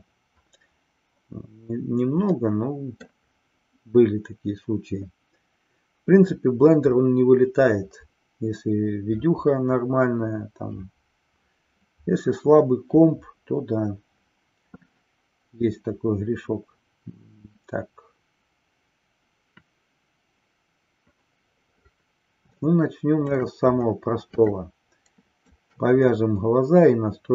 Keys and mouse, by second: 2.3-3.2 middle drag, 22.6 shift+middle click, 24.6-25.7 shift+middle drag, 27.2 click.